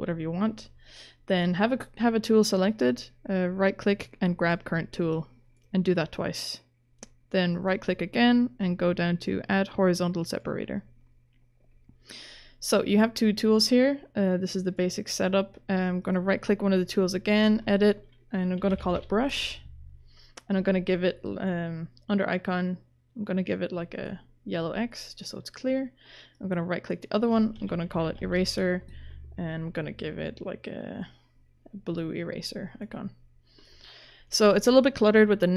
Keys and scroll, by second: 18.3-19.5 typing, 27.3-28.7 typing.